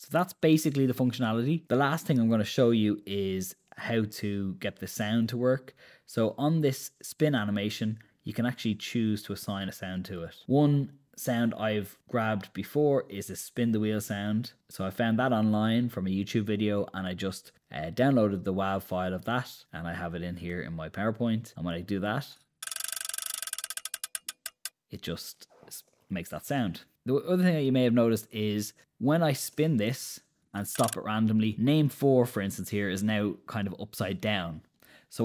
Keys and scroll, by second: 20.8 super+Return, 26.5 Escape, 29.8 super+Return.